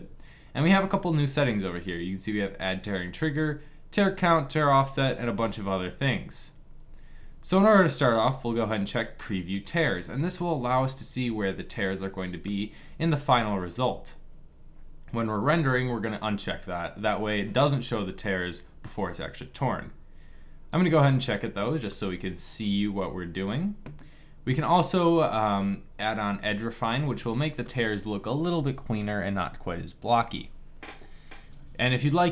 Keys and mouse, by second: 5.5 click, 5.7 click, 7.4-8.9 middle drag, 10.0 click, 11.0 middle click, 21.3-25.7 middle drag, 27.3 middle click.